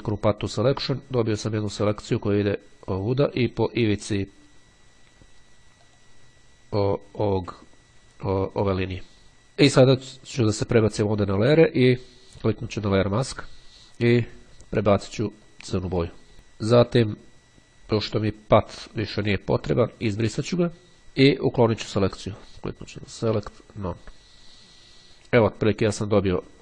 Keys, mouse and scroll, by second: 6.1 click, 9.9 click, 12.7 click, 15.5 click, 18.3 click, 19.7 click, 22.5 click, 24.1 click, 25.7-26.2 ctrl+scroll up 2.